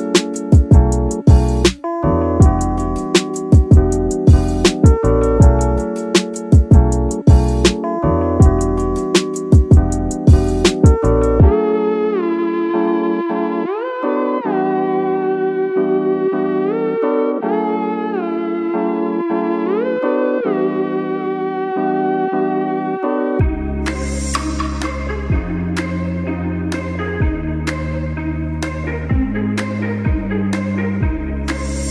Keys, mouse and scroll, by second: 0.7 click, 1.1 shift+middle drag, 1.2 scroll up 2, 1.4-2.0 middle drag, 2.0 g, 2.8 click, 2.9-4.0 middle drag, 4.0 alt+a, 4.3 z, 4.9 click, 5.1 g, 6.1 click, 6.5 g, 7.3 click, 7.7 g, 8.4 alt+click, 8.5 alt+a, 8.9 ctrl+s, 9.1-9.9 middle drag, 9.9-10.4 scroll up 2, 10.4 click, 10.8 middle click, 11.6 g, 12.3 click, 12.4 g, 13.6 click, 13.7 g, 15.1 click, 15.1 alt+a, 15.4-15.9 middle drag, 15.9 ctrl+s, 16.2-16.8 shift+middle drag, 16.8 click, 17.0 g, 18.4 alt+click, 18.5 alt+a, 18.7-19.4 middle drag, 19.5 click, 19.7 g, 21.1 click, 21.2 g, 21.7 click, 21.8 alt+a, 22.1-23.1 middle drag, 23.1 ctrl+s, 23.5 click, 23.9-24.3 middle drag, 24.3 g, 25.0 click, 25.2 alt+a, 25.4 middle click, 25.8 ctrl+s, 26.4-27.4 middle drag, 27.4 scroll up 2, 27.8 click, 28.1-28.5 middle drag, 28.5 g, 29.5 click, 29.7 g, 31.1 click, 31.3 alt+a, 31.4-31.9 middle drag.